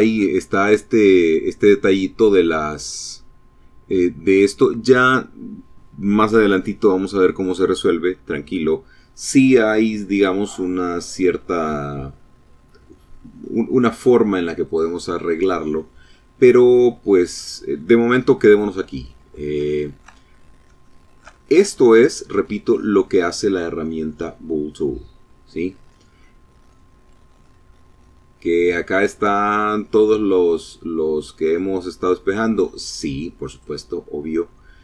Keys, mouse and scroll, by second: 13.6 click, 16.1 click, 17.6 middle click, 18.5 shift+click, 19.1-21.7 shift+middle drag, 25.1 middle click, 25.1-27.7 drag, 32.4 click.